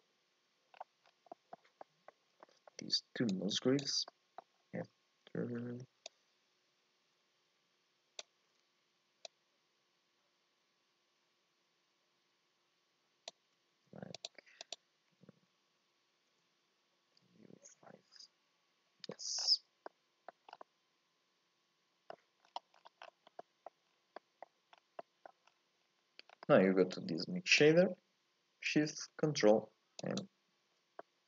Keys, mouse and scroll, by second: 3.4 click, 6.3-8.2 drag, 9.6-18.4 shift+drag, 19.5-19.9 scroll down 4, 19.9 middle click, 20.5 scroll up 1, 20.6-27.1 middle drag, 27.1 click, 30.1 ctrl+shift+click.